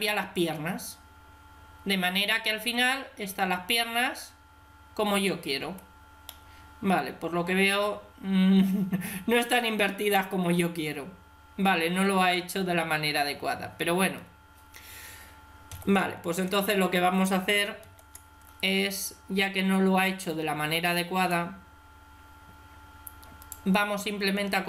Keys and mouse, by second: 2.7-7.9 middle drag, 14.1-15.5 middle drag, 15.5 KP_3, 16.1 KP_1, 17.7 ctrl+KP_3, 21.0 right click, 21.2-22.6 drag, 22.6 right click, 23.3 right click.